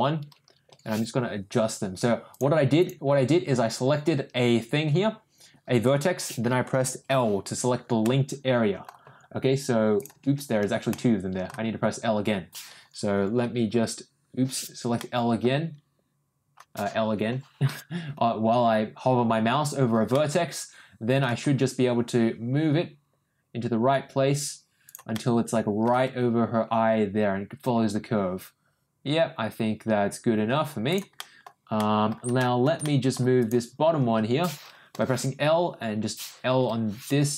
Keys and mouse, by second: 0.7 ctrl+l, 2.3 click, 2.8 click, 7.1 l, 8.0 middle click, 9.9 g, 10.9 middle click, 13.1 ctrl+;, 13.7 l, 14.9 middle click, 17.3 l, 20.1-21.1 middle drag, 21.4 g, 25.1 middle click, 26.0 g, 31.1 middle click, 31.7 middle click, 32.3 shift+middle click, 32.8 middle click, 33.4 click, 34.9 l, 36.6 l.